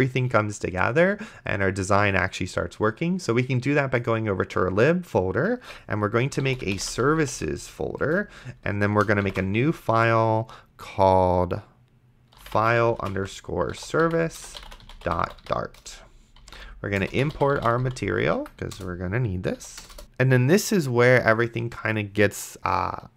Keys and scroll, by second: 6.3-7.9 typing, 8.0 Return, 9.5 ctrl+shift+n, 12.1-18.6 typing, 18.7 Return, 19.6 End, 19.8 Return, 20.0 ctrl+z.